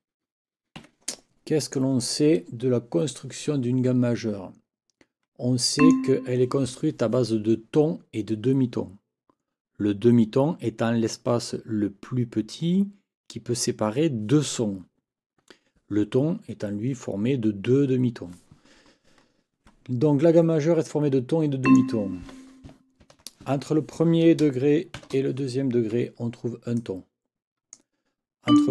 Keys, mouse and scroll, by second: 0.8 Escape, 1.6 click, 5.8 click, 21.6 click, 23.0 ctrl+t, 25.0 shift+t, 25.9 Escape, 26.8-27.9 drag, 28.5 click.